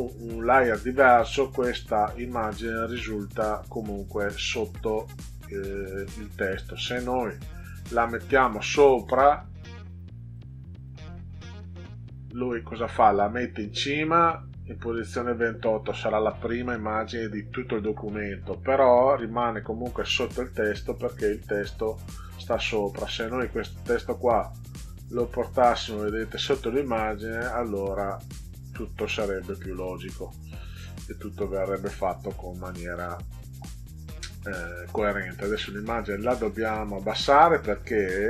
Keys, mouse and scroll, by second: 9.2 click, 10.3 click, 10.7 click, 11.4 click, 21.1 click, 23.1 click, 24.9 click, 25.5 click, 30.4 click, 31.0 click, 34.0-34.5 drag, 36.1 click.